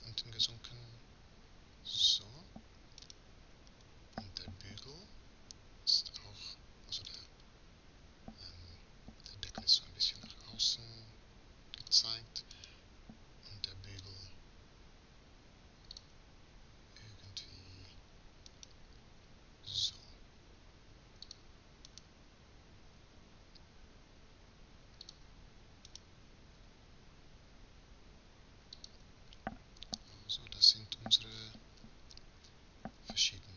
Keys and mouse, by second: 3.4 right click, 4.3-5.7 middle drag, 7.5-8.5 right drag, 8.9 r, 12.9-13.9 right drag, 13.6 r, 16.9 right click, 17.1 right click, 18.5-19.7 right drag, 18.9 r, 19.7 click, 22.3 right click, 23.1-27.5 drag, 23.1 r, 26.2 r, 32.4 a, 32.6 a, 33.4 click.